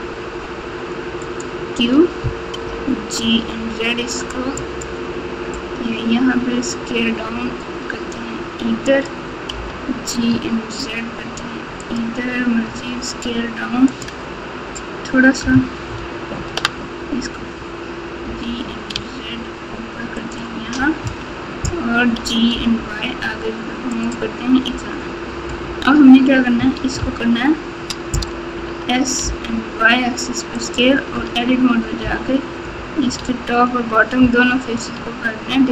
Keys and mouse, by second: 2.6 g, 7.7 s, 9.5 g, 13.2 s, 15.8 ctrl+KP_8, 16.4 ctrl+KP_8, 16.4 ctrl+KP_8, 16.6 ctrl+KP_8, 18.2 g, 21.0 KP_3, 22.1 g, 26.9 ctrl+KP_4, 27.4 ctrl+KP_4, 28.6 s, 31.2 Tab, 32.0 KP_7, 33.1 alt+z, 34.7 3.